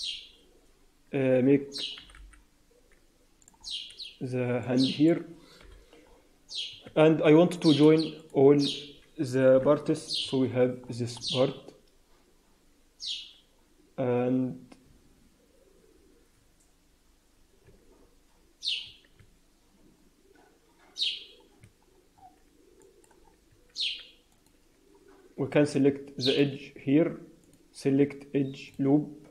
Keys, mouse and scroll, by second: 1.0-1.9 scroll up 5, 1.9 g, 3.5-4.4 scroll down 4, 4.5 middle click, 5.5 KP_1, 6.4-7.2 scroll up 2, 6.8 Tab, 7.2 Tab, 8.1 shift+click, 9.4 ctrl+j, 10.2 Tab, 10.5 scroll up 2, 10.8 Tab, 10.8-11.5 scroll down 8, 11.4-11.8 scroll up 2, 17.6 Tab, 18.8 Tab, 19.1 Tab, 21.6 Tab, 21.8 scroll down 4, 22.0-22.6 scroll up 5, 22.7 alt+middle click, 23.1-23.8 scroll up 3, 23.4 Tab, 24.2 middle click, 26.2 click, 27.4 click, 28.6 click.